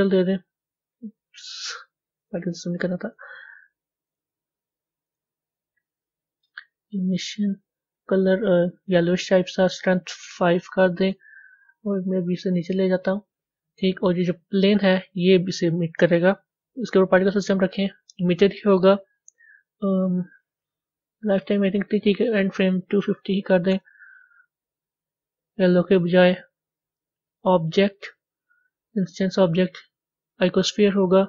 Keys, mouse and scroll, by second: 2.2 click, 4.1 click, 6.4-8.2 drag, 9.4-12.0 drag, 12.0 g, 14.7 click, 17.4 click, 23.7-29.2 drag.